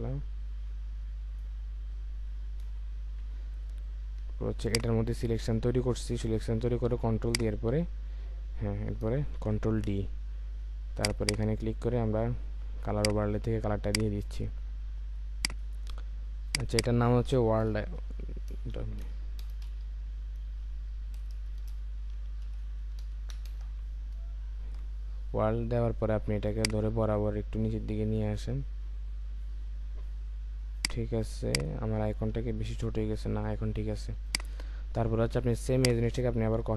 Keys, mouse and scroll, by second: 2.6 Return, 4.7 ctrl+click, 9.4 ctrl+d, 11.2 double click, 16.7 double click, 18.0-19.6 typing, 21.3-23.3 typing, 23.5 Return, 35.8 alt+click.